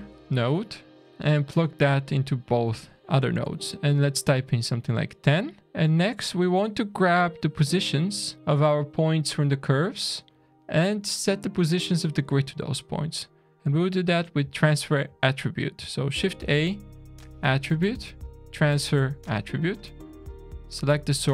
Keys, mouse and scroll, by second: 1.0 click, 2.6 click, 4.4 scroll down 1, 4.5 middle click, 5.6 middle click, 5.8 scroll down 1, 6.4 middle click, 10.2 middle click, 12.3 middle click, 13.6 middle click, 16.1 shift+a, 20.6 click.